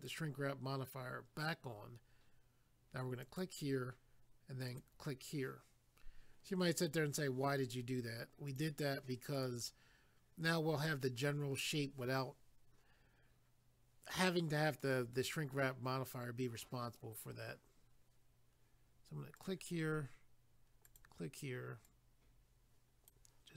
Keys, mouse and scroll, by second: 0.1 click, 0.2 click, 3.2 click, 3.4 click, 4.7 click, 4.8 click, 8.5 click, 8.6 click, 9.3 click, 9.4 click, 15.9 scroll up 1, 19.4 click, 19.5 click, 20.9 click, 21.0 click, 21.9 click.